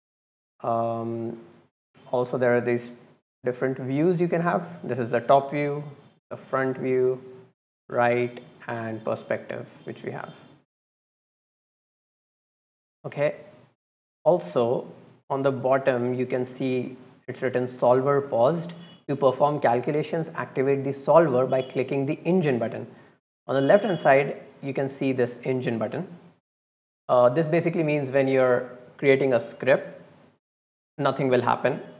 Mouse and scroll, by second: 0.4-0.9 right drag, 2.6 click, 4.1 click, 5.4 click, 6.1 click, 6.9 click, 7.5 click, 8.1 click, 8.9 click, 9.8-10.8 drag.